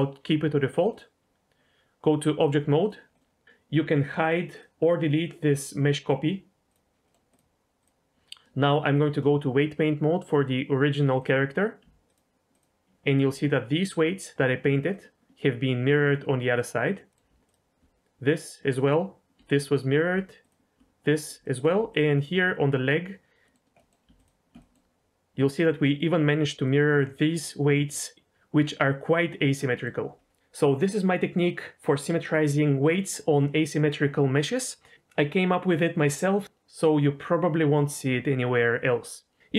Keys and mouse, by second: 0.9 middle click, 2.5 click, 3.1 middle click, 3.4 ctrl+z, 4.1 click, 4.5 click, 6.6 click, 7.0-7.5 middle drag, 7.8 click, 8.3 ctrl+z, 8.9 shift+click, 10.4-11.2 drag, 12.0 ctrl+click, 14.9 ctrl+click, 16.4 middle click, 17.0 middle click, 17.4 ctrl+click, 18.8 ctrl+click, 20.4 ctrl+click, 21.4 shift+middle click, 21.9 ctrl+click, 23.4 middle click, 23.7 middle click, 24.5 middle click, 26.6 middle click, 27.7 middle click, 29.6 middle click.